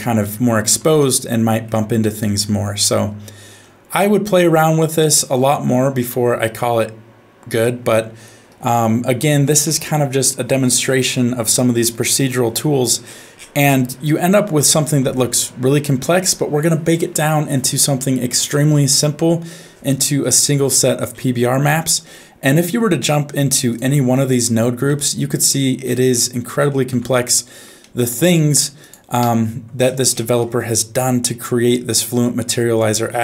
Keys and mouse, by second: 0.2 shift+middle click, 1.0 middle click, 2.8 middle click, 4.0-6.5 middle drag, 8.8 shift+middle click, 12.5 n, 14.0 middle click, 22.0 middle click, 23.7 click, 24.8 Tab, 26.1 middle click, 26.9 Tab, 27.9 middle click, 28.8 click, 29.2 Tab, 30.3 middle click, 31.3 middle click, 32.3 middle click.